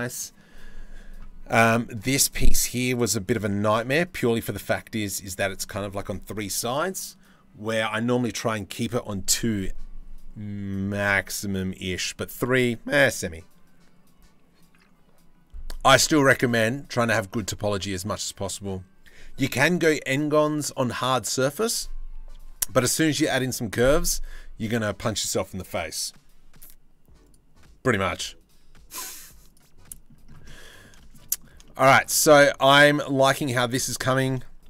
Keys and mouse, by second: 3.0-3.5 shift+middle drag, 29.1 drag, 29.5 middle click, 30.1 middle click, 30.6 shift+middle click, 31.5 middle click, 32.9 shift+middle click, 33.4 click, 34.4 shift+d.